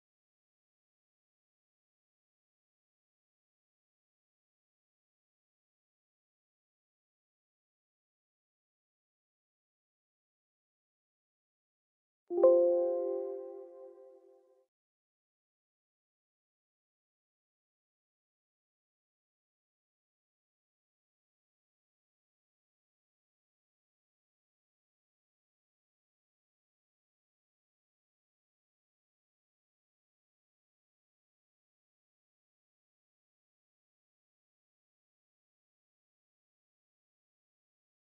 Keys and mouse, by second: 1.4 double click, 3.6 click, 3.8 double click, 6.3 click, 6.7 click, 17.2 click, 22.3-26.9 typing, 28.3-35.5 typing.